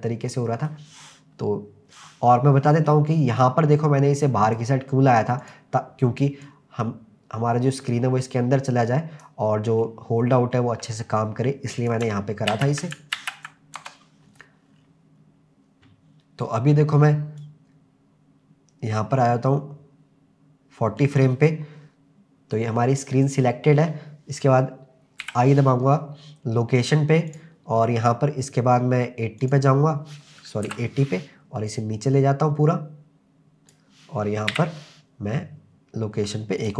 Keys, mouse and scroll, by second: 2.5-2.9 scroll down 2, 2.9-3.4 middle drag, 3.8-4.4 scroll up 2, 4.4 click, 5.4 click, 6.4 click, 9.8-10.4 middle drag, 11.8 click, 12.5 ctrl+z, 13.2 ctrl+z, 13.8 KP_0, 14.7-15.4 scroll down 4, 17.4-21.2 drag, 29.4 click, 30.6 Right, 31.7 click, 34.5 i.